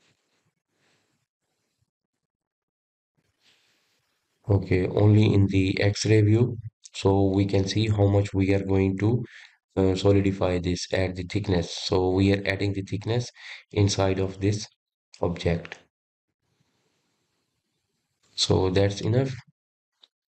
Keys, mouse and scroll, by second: 1.0 shift+z, 1.4 click, 2.1 click, 4.1-4.9 drag, 4.9-15.4 middle drag, 17.3-19.5 drag, 19.5-20.3 middle drag.